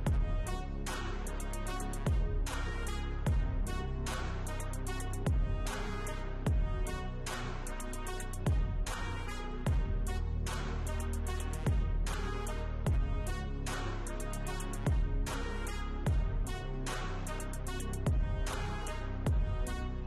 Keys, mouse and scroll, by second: 5.1 right click, 9.1-9.8 scroll up 1.